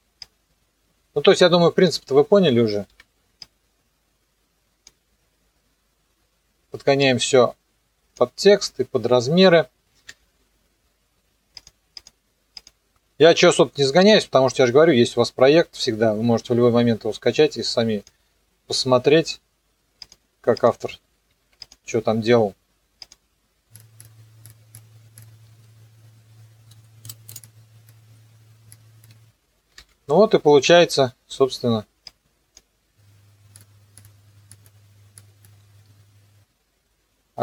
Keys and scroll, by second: 10.0 m, 25.5 KP_0, 27.0 space, 29.8 alt+[, 30.6 t, 35.6 KP_0.